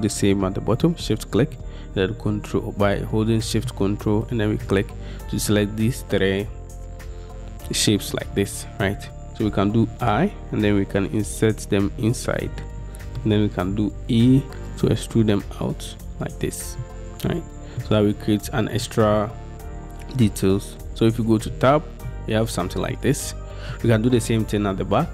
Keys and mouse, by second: 14.5 e, 18.9 middle click, 21.0 Tab, 21.6-24.0 drag.